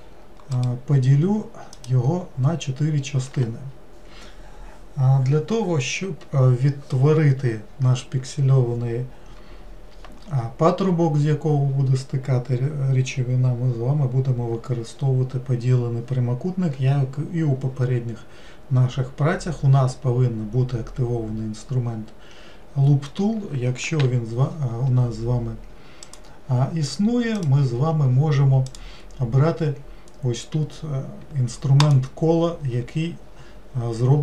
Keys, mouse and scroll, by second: 0.5-3.6 right drag, 26.1-27.4 drag, 28.6-34.2 drag.